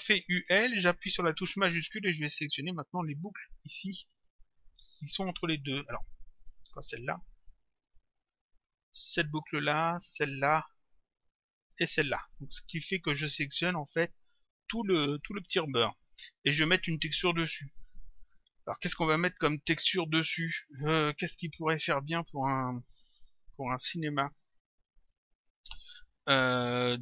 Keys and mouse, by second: 0.2 u, 5.2 shift+click, 9.2 shift+click, 11.6 shift+click, 13.6 click, 25.1 click.